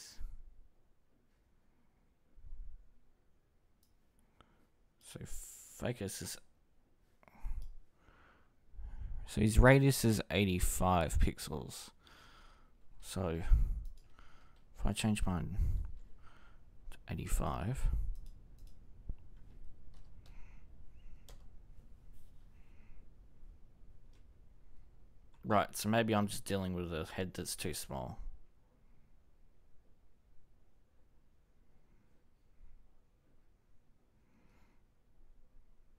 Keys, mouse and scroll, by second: 8.8-11.3 ctrl+drag.